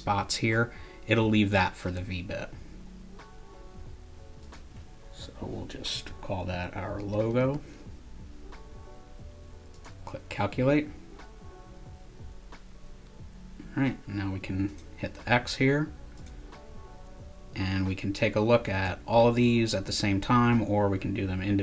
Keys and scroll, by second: 6.7-8.0 typing.